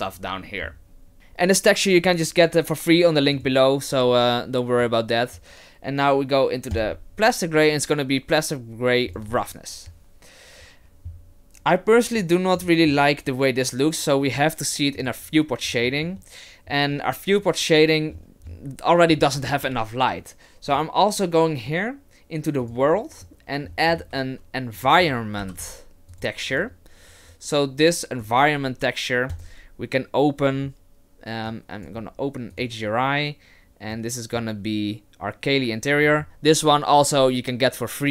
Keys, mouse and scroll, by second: 3.3 click, 12.2 click, 15.0 click, 15.6-17.1 scroll up 4, 18.1-19.2 scroll down 7, 19.2-19.8 scroll up 2, 20.7 click, 23.2 middle click, 24.0 shift+a, 27.3 click, 29.3 click.